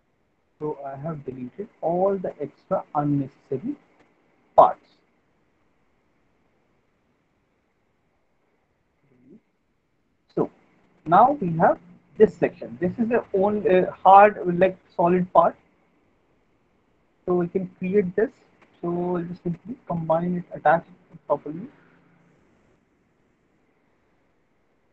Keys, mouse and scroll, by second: 3.3 alt+middle click, 3.7 middle click, 3.8 middle click, 4.1 alt+middle click, 4.9 alt+middle click, 5.4 middle click, 5.9 alt+middle click, 6.2 middle click, 6.6 middle click, 6.8 alt+middle click, 7.8 click, 8.4 Delete, 10.1 middle click, 10.8 alt+middle click, 11.3 middle click, 12.3 click, 17.7 alt+middle click, 19.3 click, 21.6 right click, 22.4 click, 24.5 right click.